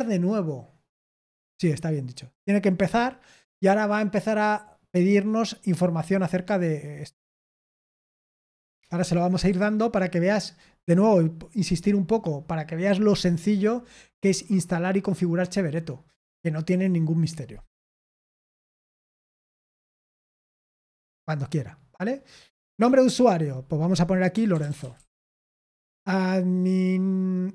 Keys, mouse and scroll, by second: 22.6 click, 24.0-25.6 typing.